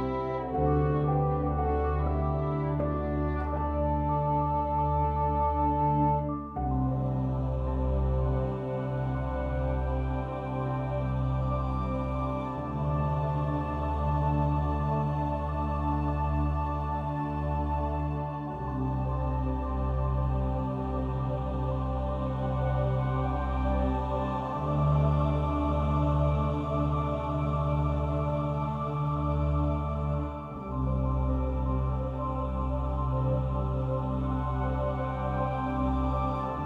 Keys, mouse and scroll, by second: 1.1 click, 2.9-4.0 drag, 4.0 ctrl+r, 11.5 a, 21.5 ctrl+r, 28.0-29.7 right drag, 29.7 click, 31.7 a, 32.8 ctrl+r, 35.8-36.6 drag.